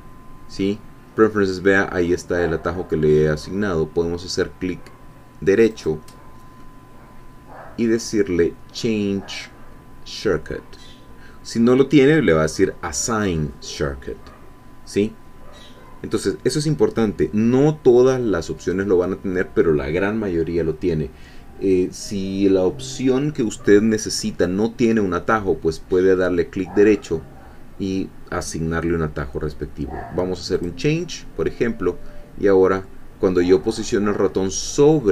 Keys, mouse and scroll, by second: 5.7 right click, 30.6 click.